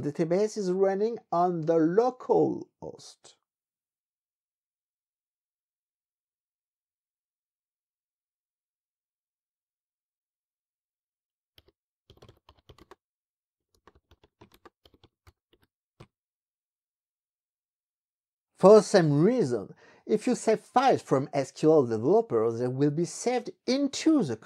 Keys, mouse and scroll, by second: 4.5 click, 7.1-8.1 drag, 11.5-16.4 typing, 19.9 click.